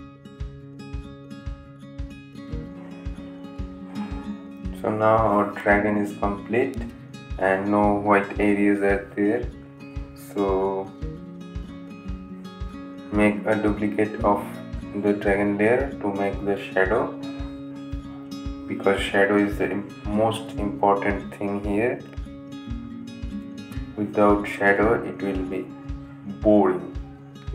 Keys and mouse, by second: 8.2 click, 9.6 right click, 9.7 click, 11.8 click, 14.4 click, 14.7 right click, 16.2 click, 18.4 click, 21.5 click, 22.9 s, 25.0 Return.